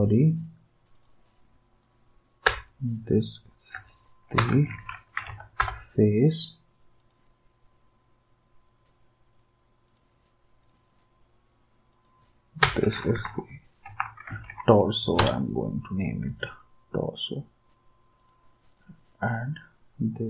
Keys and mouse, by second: 2.5 Return, 3.7-5.7 typing, 12.6 Return, 12.9-15.0 typing, 15.2 Return.